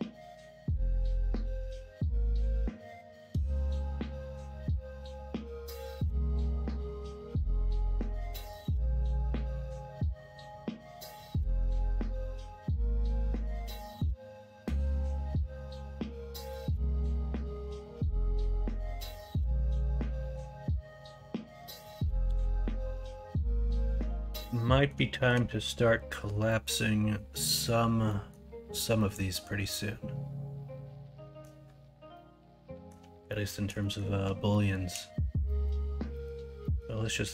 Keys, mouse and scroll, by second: 2.8 middle click, 3.3 middle drag, 4.8 middle click, 5.7 middle click, 6.9 middle click, 12.0-12.9 middle drag, 15.1-16.3 middle drag, 17.0-18.3 middle drag, 18.9 middle drag, 19.5 shift+middle drag, 20.0-21.4 middle drag, 22.9 middle drag, 23.8 shift+middle drag, 24.5-24.8 middle drag, 25.1 shift+middle drag, 25.5 middle click, 26.4-27.5 middle drag, 28.0 middle drag, 29.0-31.4 middle drag, 32.1-32.9 middle drag, 33.2 shift+middle drag, 33.8 middle drag, 34.5 shift+middle drag, 35.4 middle click, 36.1 middle drag, 36.6 middle click, 37.1 middle click.